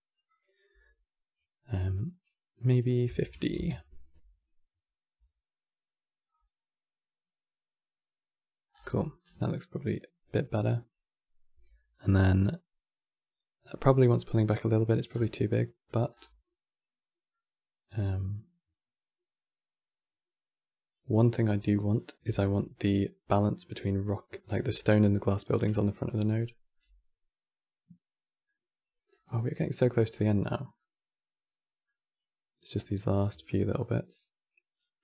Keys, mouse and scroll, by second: 9.1-12.4 scroll down 6.